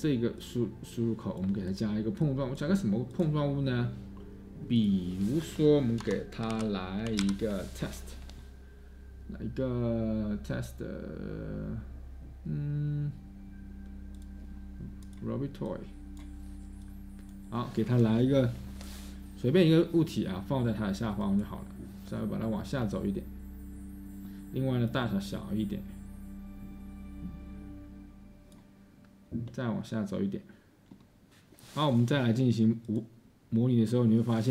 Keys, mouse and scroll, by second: 6.0 Tab, 6.3-7.9 typing.